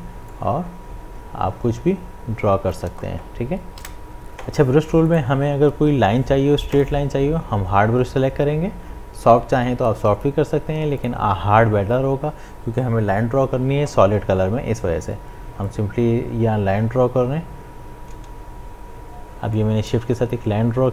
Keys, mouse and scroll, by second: 4.0 ctrl+z, 5.1 right click, 6.8 click, 11.0 click, 15.6-20.9 drag.